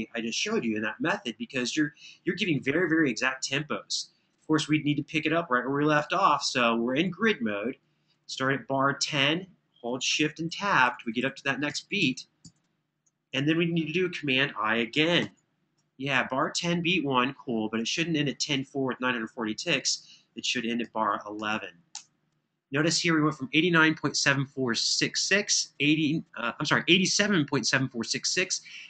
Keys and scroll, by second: 9.9 Home, 10.3 Home, 10.6 Home, 11.0 Home, 11.7 Home, 12.2 Home, 14.8 super+i, 20.6-21.7 typing.